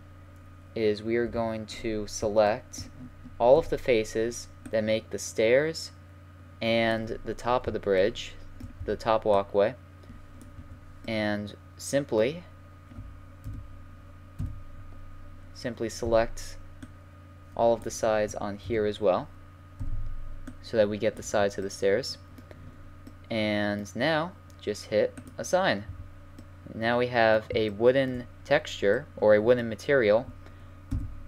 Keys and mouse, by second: 1.3 KP_7, 3.5 c, 8.8 c, 11.4 middle click, 13.4 KP_1, 14.4 KP_3, 16.0 c, 18.6 KP_9, 19.8 c, 25.0 middle click, 25.3-26.7 drag, 25.9 a, 26.7-30.6 middle drag, 30.7 middle click, 30.9 KP_5.